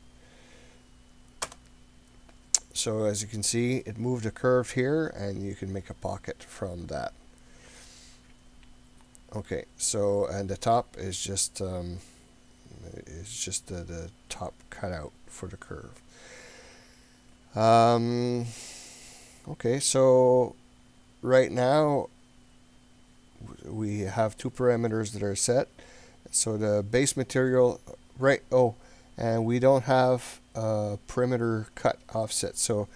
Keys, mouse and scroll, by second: 3.8-7.8 middle drag, 8.8 scroll down 2, 9.3-10.3 scroll up 2, 26.7-31.5 drag, 31.8-32.9 drag.